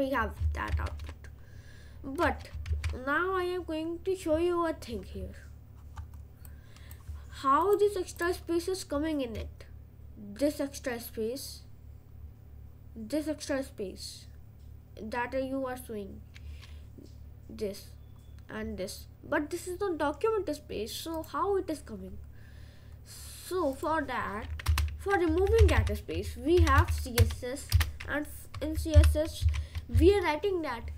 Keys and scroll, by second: 24.7 Return, 25.3-27.2 typing, 27.8 Return, 29.0 shift+8, 29.4 shift+[, 30.0 Return.